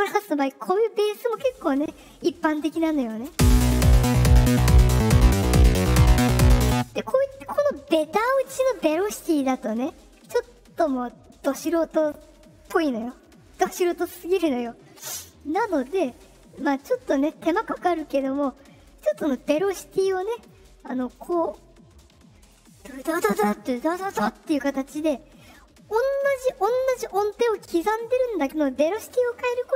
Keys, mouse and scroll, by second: 0.6 middle click, 0.6 scroll, 3.2 space, 6.6 space, 15.9 middle click, 15.9 scroll, 19.2 right click, 20.0 right click, 20.9 right click, 21.5 right click, 23.0 right click, 23.7 right click.